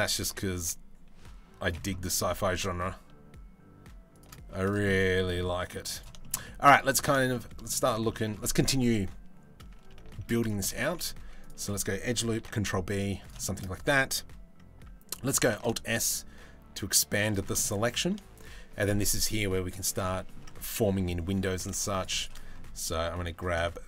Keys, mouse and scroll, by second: 1.9 g, 4.1 Tab, 4.5-4.8 middle drag, 5.2 middle click, 5.8 shift+middle drag, 6.0 middle drag, 6.7 shift+middle drag, 7.1 middle drag, 7.7 shift+middle drag, 9.7 shift+middle drag, 10.3 Tab, 10.8 ctrl+r, 12.0 ctrl+b, 13.0 shift+middle click, 15.1 alt+s, 17.1 shift+middle click, 19.8 middle click, 20.6 middle click, 21.0 3, 22.4 middle click.